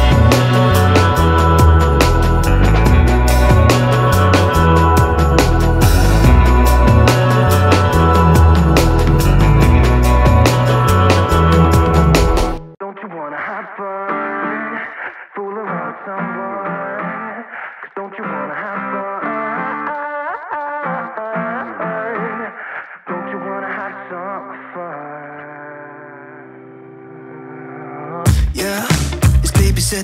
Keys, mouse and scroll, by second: 3.9 click, 3.9-6.8 drag, 4.8-5.6 typing, 7.4-14.0 drag, 16.4 click, 19.0-28.3 drag, 26.2-27.2 typing, 29.2 right click.